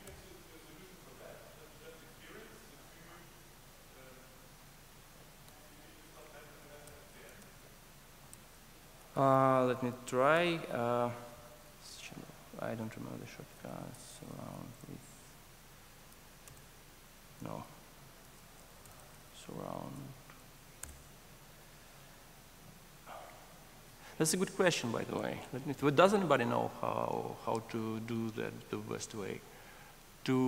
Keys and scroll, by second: 8.4 alt+shift+t, 13.4 ctrl+shift+super+a, 17.2 super+t, 18.2 ctrl+shift+super+a.